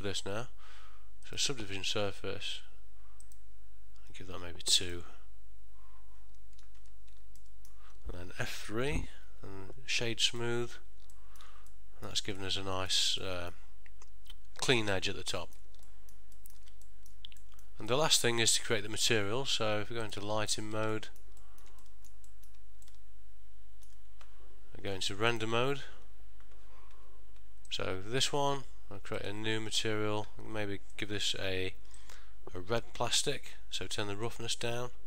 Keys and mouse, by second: 0.0 click, 3.3 click, 5.0 click, 6.9 Tab, 7.5 ctrl+middle click, 9.0 F3, 11.3 ctrl+middle click, 11.8 middle click, 12.5 ctrl+middle click, 13.3 middle click, 15.9 ctrl+middle click, 16.5 ctrl+middle click, 16.7 middle click, 16.9 shift+middle click, 17.5 middle click, 18.0 ctrl+middle click, 18.3 shift+middle click.